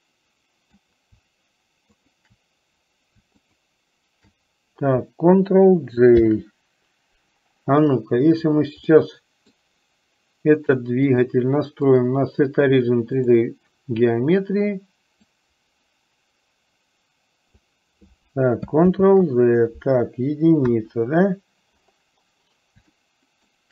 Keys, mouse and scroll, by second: 2.0 shift+click, 6.3 ctrl+j, 9.1 middle click, 11.2-13.5 drag, 15.4-17.9 drag, 19.0 ctrl+z, 20.8 KP_1, 23.2 shift+middle click.